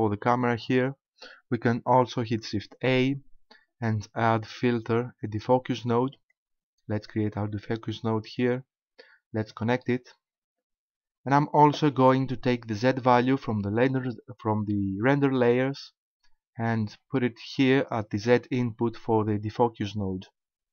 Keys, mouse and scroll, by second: 2.8 shift+a, 7.1 click, 7.3 click, 9.5 click, 13.9 click.